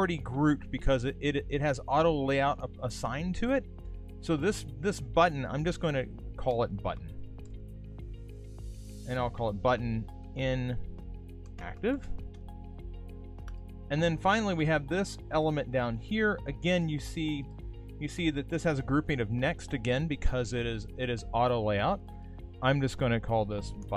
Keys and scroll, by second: 12.0 shift+i, 23.8 shift+b.